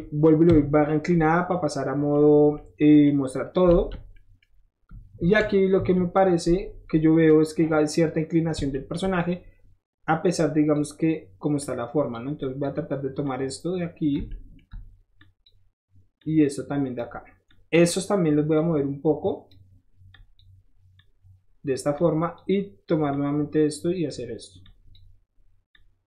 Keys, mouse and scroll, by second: 0.5 KP_Divide, 1.3 middle click, 1.5-2.1 scroll up 1, 2.3 click, 2.9 middle click, 3.8 alt+z, 4.2 middle click, 5.2 KP_1, 5.7 KP_3, 8.7 shift+middle click, 10.4 shift+click, 11.6 click, 12.4 click, 13.3 click, 14.3 shift+middle click, 15.2 shift+click, 16.2 shift+click, 17.5 click, 18.6 click, 20.1 click, 21.0 click, 22.0 click, 23.1-24.1 drag, 24.6 click, 25.7-26.0 drag.